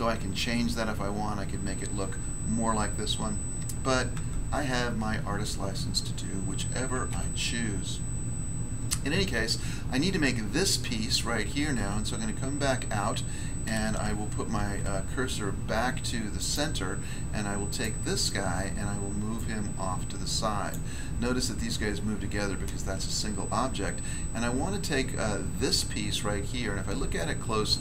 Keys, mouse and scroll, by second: 4.1 Tab, 4.7 scroll down 1, 7.0 a, 9.0 scroll down 1, 11.7 Tab, 14.5 s, 16.3 click, 16.5 click, 17.6 right click, 17.8 right click, 19.3 click, 20.6 click, 22.7 scroll up 1, 24.0 scroll down 1, 26.6 scroll up 1, 27.1 shift+middle click.